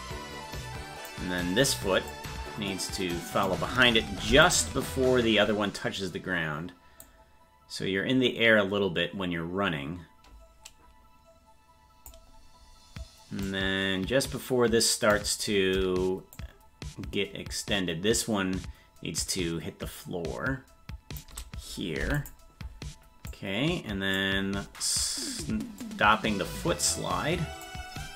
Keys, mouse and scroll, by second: 2.1-3.4 drag, 4.2 i, 7.0-12.1 drag, 13.4-15.1 drag, 16.3-21.2 shift+drag, 23.3 click, 23.3 i, 25.8-27.6 drag.